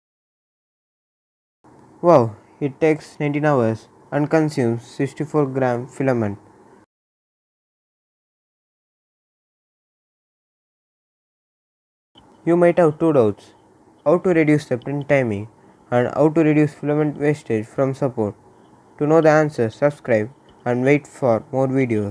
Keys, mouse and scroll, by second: 2.2-13.3 right drag.